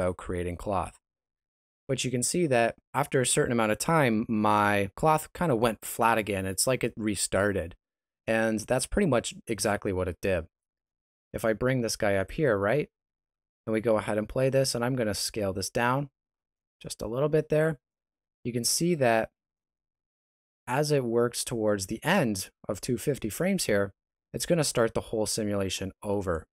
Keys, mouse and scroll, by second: 11.0 click.